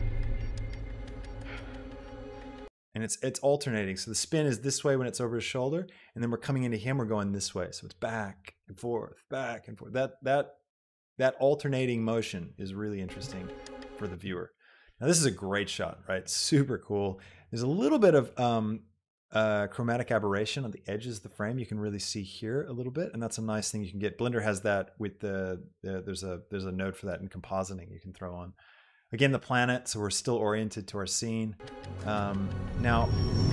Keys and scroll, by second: 2.7 space, 13.4 space.